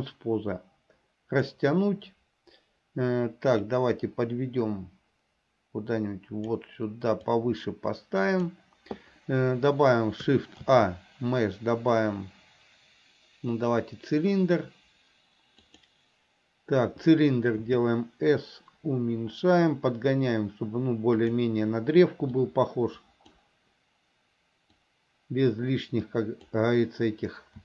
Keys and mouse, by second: 0.0-1.7 drag, 3.9-6.6 drag, 7.5-8.7 drag, 10.7 shift+a, 17.7 s, 22.5 click, 24.9-26.7 drag.